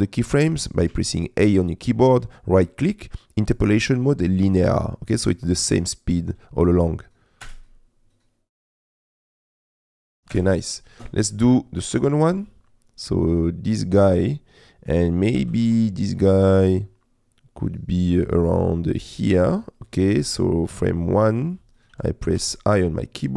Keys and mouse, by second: 0.9 a, 2.2-4.7 right drag, 5.4 click, 7.4 space, 13.2 middle click, 14.1 middle click, 15.4 g, 15.7 z, 19.0 middle click, 19.8 g, 19.8 shift+z, 20.5-21.6 drag, 22.4 i.